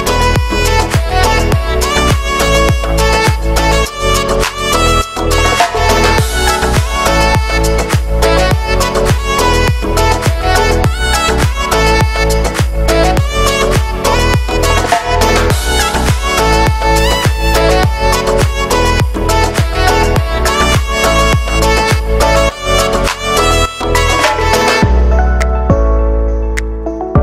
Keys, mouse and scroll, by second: 0.5 middle click, 1.1-1.6 scroll up 1, 1.6 a, 2.3 shift+n, 3.4 right click, 3.7 ctrl+r, 4.5 ctrl+z, 4.7 shift+Tab, 5.0 ctrl+r, 7.3 click, 7.9 right click, 8.0 e, 8.7 shift+middle click, 9.1 s, 9.6 shift+middle click, 10.0 right click, 10.2 l, 10.5 l, 10.8 g, 11.3-12.3 middle drag, 12.3 l, 12.6 l, 12.9 scroll down 2, 13.0 middle click, 13.3 s, 14.1 middle click, 14.4 s, 14.8 middle click, 15.0 g, 15.4 scroll down 3, 15.5-17.0 middle drag, 17.0 z, 18.0 z, 18.1-19.2 shift+middle drag, 19.2 g, 20.0 middle click, 20.3 scroll up 1, 20.5-22.1 typing, 22.8 middle click, 23.5-23.8 scroll up 1, 23.8 middle click, 24.3 Tab, 25.2 w, 25.5-26.5 scroll down 3, 25.8 middle click, 26.0 shift+middle click, 26.5 shift+middle click.